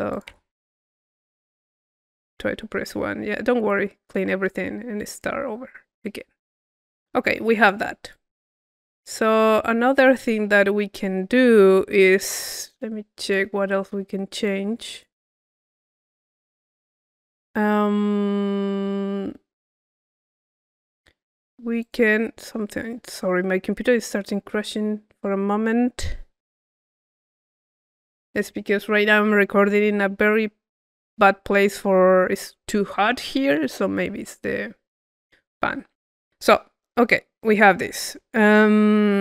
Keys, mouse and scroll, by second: 0.9 click, 1.2-2.9 middle drag, 4.3-6.5 middle drag, 6.6 middle click, 7.2-9.0 drag, 9.0-12.0 middle drag, 12.8-13.9 drag, 14.4 click, 15.7 click, 17.1 click, 21.8 click, 24.0-25.5 drag, 37.0 middle click, 37.6-38.6 drag, 38.7 click.